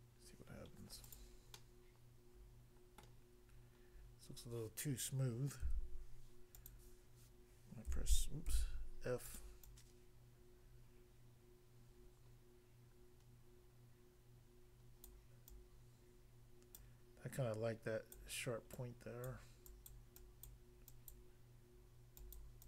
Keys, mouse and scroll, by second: 1.1 click, 1.2 click, 1.6 middle click, 3.0 middle click, 5.6 f, 6.6 click, 6.6 click, 8.0 d, 8.5 f, 9.3 click, 9.4 click, 9.6 click, 15.1 click, 15.5 click, 16.8 click, 17.4 click, 18.1 click, 18.8 click, 19.3 click, 19.7 click, 19.9 click, 20.4 click, 21.1 click, 22.2 click, 22.4 click.